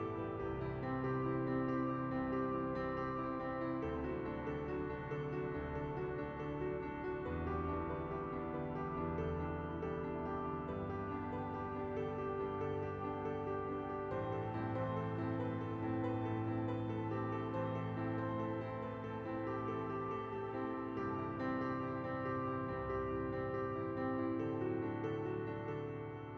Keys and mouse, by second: 0.1 click, 0.2 Tab, 1.0 middle click, 1.7 click, 2.2 KP_1, 3.0 shift+middle click, 3.5 Tab, 4.0 shift+middle click, 5.2 middle click, 6.7 middle click, 7.0 middle click, 8.4 KP_1, 8.7 shift+middle click, 9.2 ctrl+b, 10.4 click, 10.7 click, 11.2 Tab, 11.3 middle click, 11.7 KP_1, 12.2 shift+middle click, 12.5 Tab, 13.8 ctrl+b, 16.3 Tab, 17.1 click, 17.8 shift+middle click, 18.5 click, 18.7 middle click, 19.1 shift+middle click, 19.5 middle click, 20.5 KP_1, 20.9 shift+middle click, 21.3 middle click, 22.0 Tab, 22.4 middle click, 22.8 middle click, 24.3 shift+d, 24.8 p, 25.3 Tab, 25.5 KP_1, 26.2 click.